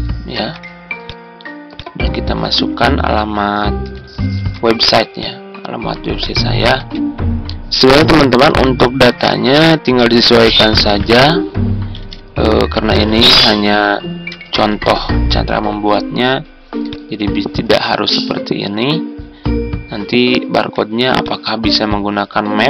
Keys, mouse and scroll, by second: 0.2 ctrl+g, 4.2 ctrl+d, 6.7 ctrl+a, 7.7-15.1 typing, 18.9-19.6 typing.